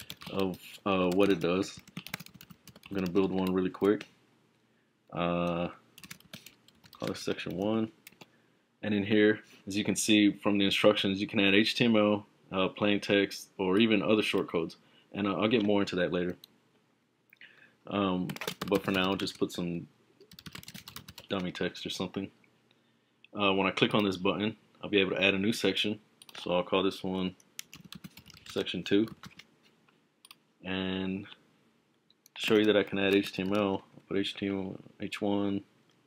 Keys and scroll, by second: 0.0-3.6 typing, 6.5-8.1 typing, 18.2-21.7 typing, 27.6-29.7 typing, 32.8-34.0 typing.